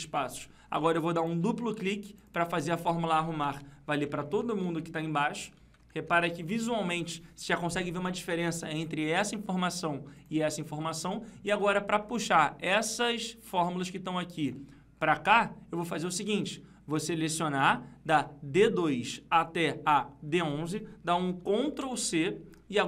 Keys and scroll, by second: 3.8 F2, 21.9 ctrl+c.